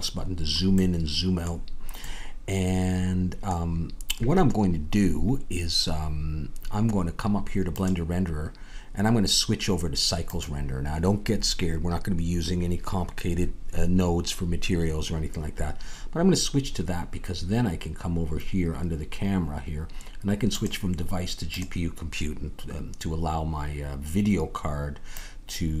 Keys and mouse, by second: 9.3-12.9 drag, 21.7 click, 25.3-25.8 drag.